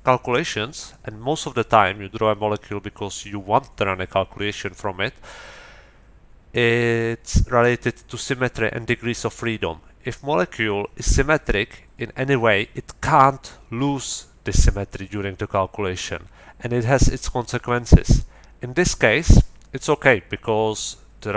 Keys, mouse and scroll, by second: 19.1-21.3 middle drag.